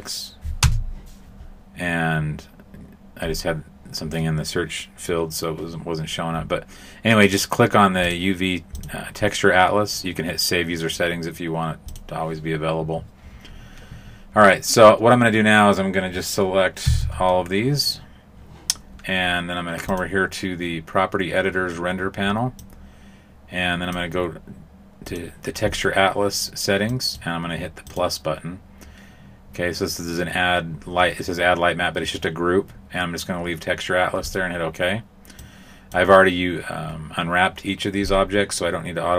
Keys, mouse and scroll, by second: 16.8 a, 16.9 a, 19.8 click, 22.6 click, 25.0 click, 26.9 click, 27.8 click, 35.3 click.